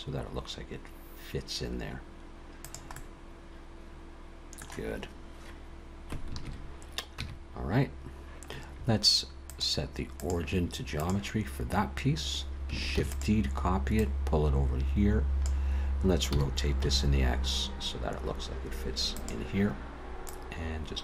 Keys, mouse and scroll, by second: 2.9 middle click, 6.4 ctrl+KP_3, 7.2 Tab, 9.5 click, 12.9 shift+d, 14.0 click, 16.3 r, 20.3 click.